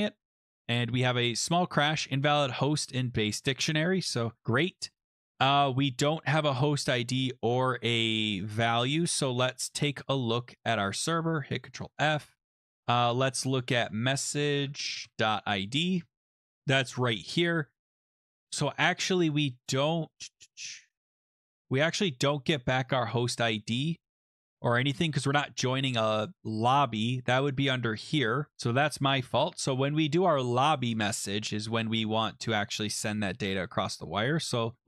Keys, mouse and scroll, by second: 3.1 scroll down 4, 3.3-4.0 scroll, 4.4-5.2 scroll, 5.2 scroll, 9.0 click, 9.1 click, 9.7 ctrl+c, 10.7 click, 11.5 ctrl+f, 11.7 ctrl+v, 13.7 click, 14.1-15.6 typing, 16.8 click, 19.9 click, 21.0 click, 21.1 click, 22.9 click, 25.4 ctrl+x, 26.4 scroll, 28.5 click, 28.7 click, 29.3 Return, 29.5 ctrl+v, 30.9 click, 31.0 click, 32.5 click, 33.0 ctrl+c, 33.8 click, 34.5 ctrl+f, 34.7 ctrl+v.